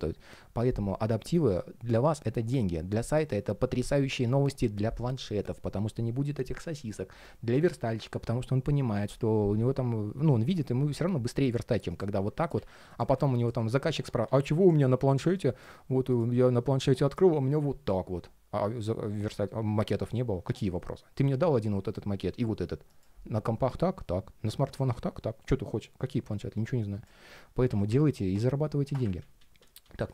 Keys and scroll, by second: 28.9 super+z.